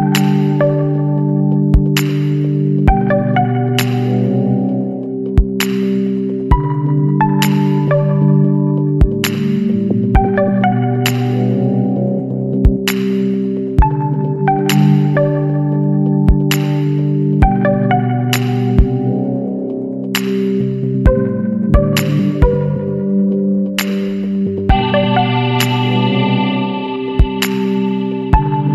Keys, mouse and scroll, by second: 0.8 click, 1.1 a, 1.7 alt+shift+click, 2.7 s, 3.6 click, 4.6 a, 5.3 alt+shift+., 5.8-6.4 alt+shift+scroll up 1, 6.7 s, 8.0 scroll up 1, 8.4 shift+click, 8.7 shift+a, 9.6 alt+shift+click, 10.1 alt+shift+click, 10.4-10.7 alt+shift+scroll up 2, 11.3 s, 12.7 click, 13.7 a, 14.5 alt+shift+click, 15.5 s, 16.5 click, 16.8 scroll down 1, 17.2 shift+middle click, 17.7 shift+a, 19.2 alt+shift+middle click, 20.2 e, 20.5 z, 23.3 click, 24.0 s, 25.4 click, 25.8 shift+click, 27.6 shift+click.